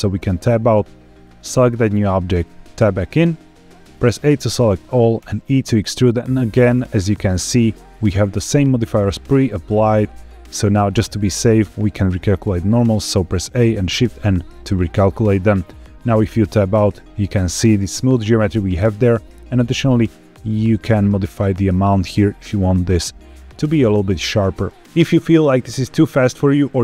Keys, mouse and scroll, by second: 0.1 Tab, 1.1 click, 2.6 Tab, 3.9 a, 5.2 e, 7.8 click, 12.4 a, 13.7 shift+n, 15.2 scroll up 1, 16.1 Tab, 16.1-16.7 scroll up 1, 20.2-24.1 shift+drag.